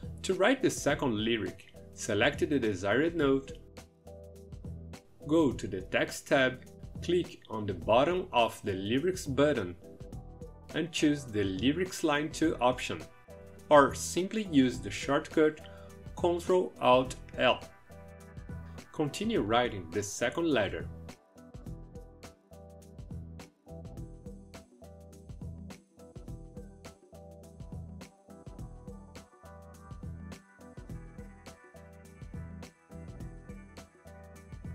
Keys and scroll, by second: 16.7 ctrl+alt+l, 19.1-24.2 typing, 25.2-26.4 typing, 27.5-34.7 typing.